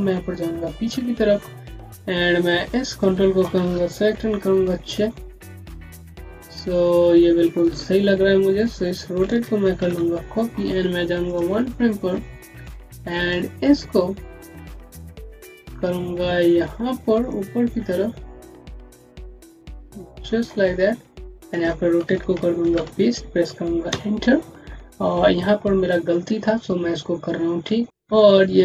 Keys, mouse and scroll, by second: 1.0 middle click, 1.2 alt+scroll down 2, 1.4 scroll up 1, 2.6 click, 4.5-5.2 typing, 8.5 click, 9.6 ctrl+c, 11.2 click, 17.1 click, 23.8 KP_Enter.